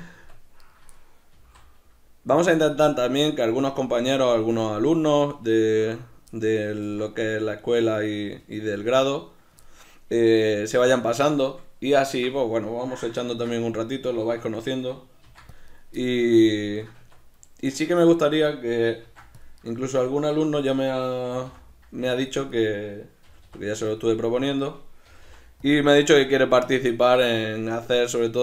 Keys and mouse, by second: 0.1 Tab, 0.6 right click, 1.4-2.5 middle drag, 1.4 g, 2.5 click, 2.6-6.8 middle drag, 5.7 Tab, 9.9-11.5 middle drag, 13.3 ctrl+r, 13.3-15.7 middle drag, 15.7 right click, 16.0-17.1 shift+middle drag, 16.9 Tab, 17.9 Tab, 17.9-19.7 middle drag, 19.0 ctrl+r, 19.7 right click, 21.3 g, 22.3 click, 22.5 right click, 23.2 g, 24.0 click, 24.5 right click, 25.1 g, 25.7 click, 26.0-27.4 middle drag, 27.4-28.4 right drag.